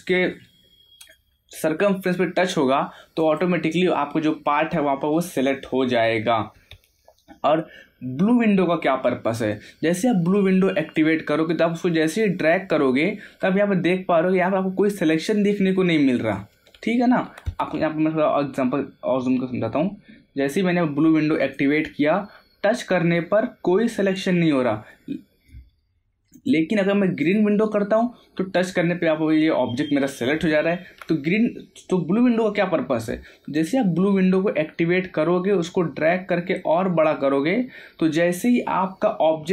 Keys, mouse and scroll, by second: 3.2 click, 10.8 click, 19.2 scroll up 1, 19.8-21.4 middle drag, 21.4 click, 23.7 scroll up 1, 23.7-25.7 middle drag, 25.7 scroll down 1, 26.3 click, 33.5 click, 36.2 scroll down 1.